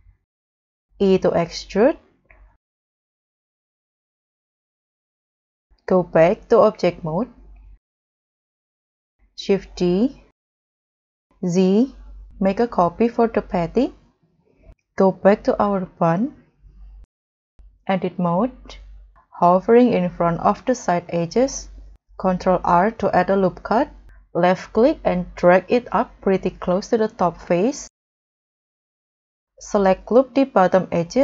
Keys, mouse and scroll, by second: 0.8 w, 0.8 e, 4.3 middle click, 5.0 scroll down 2, 5.3-5.8 scroll up 1, 7.0 double click, 9.2 click, 11.4 z, 12.6 scroll, 12.6 scroll up 1, 13.9 scroll down 2, 14.3-14.6 scroll up 2, 19.0-19.6 scroll up 4, 22.2 ctrl+r, 28.2-28.6 scroll down 5, 28.8 scroll up 4, 29.7 scroll up 1, 29.7 double click, 30.5 scroll up 2.